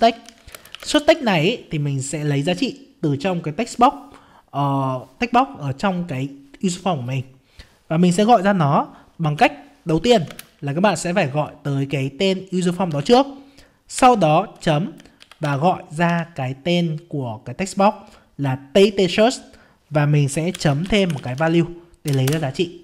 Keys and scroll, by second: 10.3 ctrl+space.